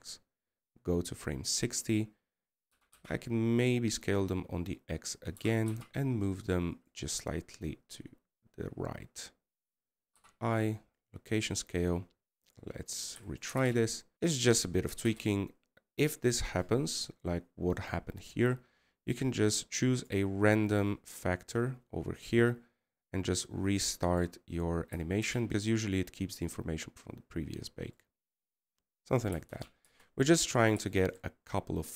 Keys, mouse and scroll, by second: 14.1 scroll down 2, 17.1-19.0 scroll up 2.